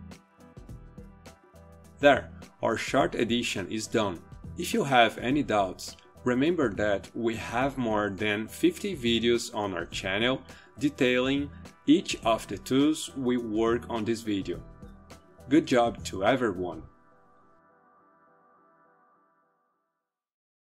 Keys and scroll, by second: 0.0-2.0 typing.